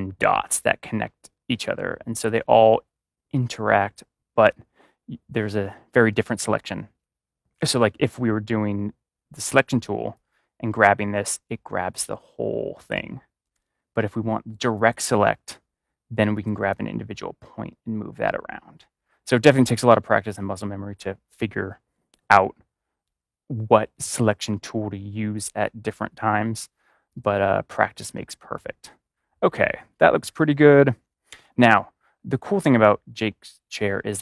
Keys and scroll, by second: 13.5 ctrl+z.